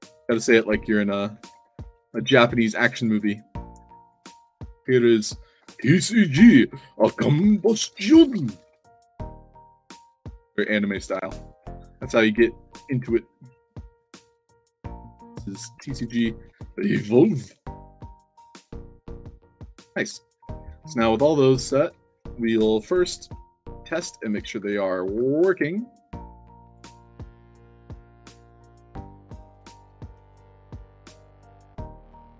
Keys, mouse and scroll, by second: 0.0-2.2 typing, 2.8 click, 3.9 click, 4.9 click, 5.6 shift+c, 6.8-11.5 typing, 9.5 click, 10.3 click, 12.6 click, 15.0 click, 15.8-17.8 typing, 18.2 click, 18.7 click, 18.9-21.6 typing, 19.0 middle click, 21.4 drag, 23.3 alt+click, 23.9 alt+drag, 24.0-25.1 typing, 25.7 click, 26.6 click, 27.2 click, 27.8 click, 28.8 click, 29.4 click, 29.8-32.3 typing, 30.2 click, 31.0 click, 31.8 click.